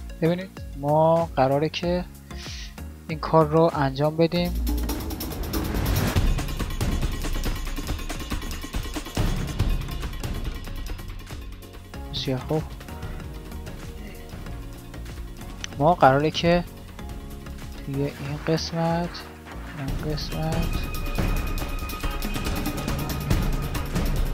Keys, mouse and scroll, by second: 1.1 n, 4.6-4.9 drag, 11.1 d, 11.3 d, 11.9 ctrl+z, 16.3-24.3 d.